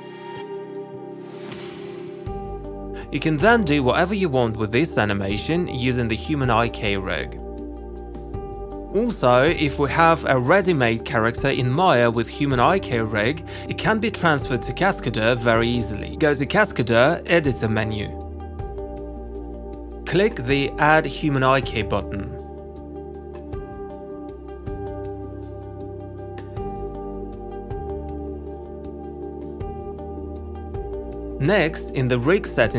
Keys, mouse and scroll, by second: 1.4 click, 2.2 click, 2.4 alt+click, 2.9 alt+middle click, 3.0 click, 3.5 w, 5.1 click, 5.3 ctrl+z, 5.7 q, 6.3 click, 6.6 w, 7.9 click, 8.6 ctrl+z, 24.8 click, 25.1 click, 25.8 click, 26.0 click, 27.4 click, 27.9 click, 30.5 alt+click, 31.0 shift+click.